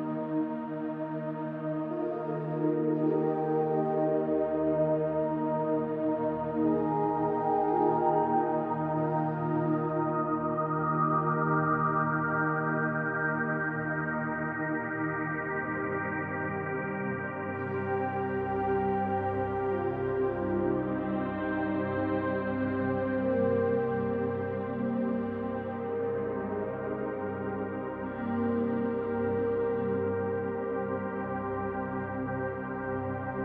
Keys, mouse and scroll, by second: 0.7 right click, 1.7 s, 3.3 right click, 3.6-6.0 middle drag, 5.6-6.0 scroll up 2, 6.0 click, 7.0 alt+click, 9.6-12.8 middle drag, 10.0 z, 10.7-11.4 scroll down 2, 11.4 scroll down 1, 12.5 Tab, 12.8 right click, 13.8-20.6 middle drag, 15.0 scroll up 1, 15.7 Tab, 17.4 KP_1, 18.0 z, 18.8 scroll down 2, 19.5 ctrl+s, 19.9-20.6 scroll up 4, 20.6 click, 21.4 g, 22.1 click, 22.8 g, 23.6 click, 24.0 g, 24.7 click, 25.4 g, 26.0 click, 27.5 e, 31.1 click, 31.2-32.3 middle drag, 32.3 click, 33.0 KP_1.